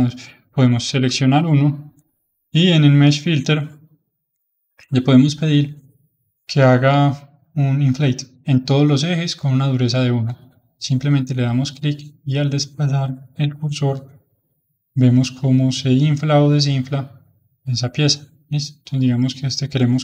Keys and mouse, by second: 0.8 h, 5.5-6.6 drag, 11.4 click.